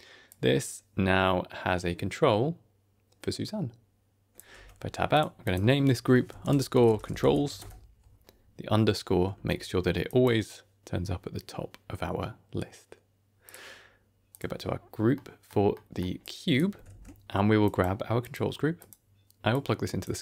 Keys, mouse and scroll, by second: 0.2-4.3 drag, 4.4 Tab, 5.0 click, 5.3-7.5 drag, 9.3 shift+a, 14.2 click, 15.0 middle click, 15.6 middle click, 16.1 click, 16.8 shift+a, 19.4 click.